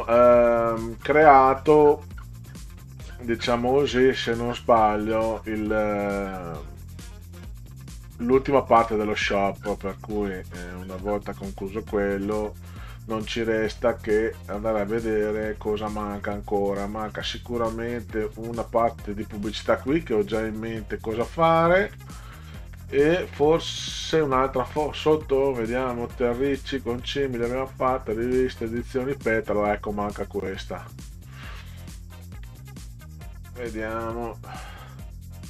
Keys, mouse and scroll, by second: 0.0-6.4 scroll down 46, 6.8-11.2 scroll down 30, 13.2 scroll up 2, 14.0 scroll up 2, 14.9-18.0 scroll up 18, 19.4-25.2 scroll up 30, 25.8 scroll down 2, 26.3-27.2 scroll down 6, 30.5 scroll up 2, 32.2-32.6 drag, 33.4-33.8 drag, 35.0-35.4 drag.